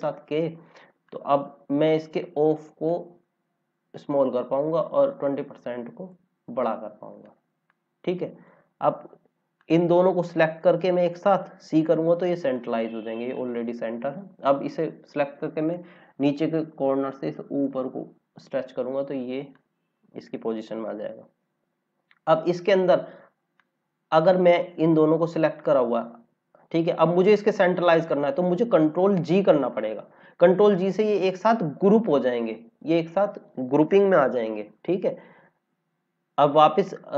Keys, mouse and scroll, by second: 1.6 click, 18.0-18.5 scroll down 2, 19.5 click, 21.7 scroll up 1, 29.8 ctrl+g, 32.3 click.